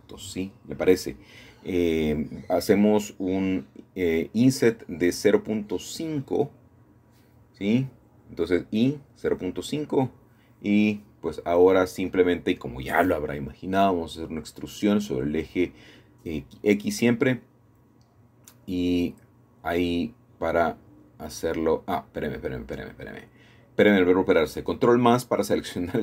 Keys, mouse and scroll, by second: 0.7 Return, 1.8 click, 3.2 i, 3.6 KP_0, 3.8 KP_5, 4.6 Return, 6.0 click, 8.1 KP_0, 8.2 KP_5, 8.8 Return, 10.9 shift+click, 11.5 shift+click, 12.0 middle click, 13.4 typing, 16.5-18.4 shift+drag, 16.7 typing, 18.4 typing, 21.5 Escape, 21.7 Escape, 21.9 Escape, 23.5 ctrl+KP_Add, 24.9 e.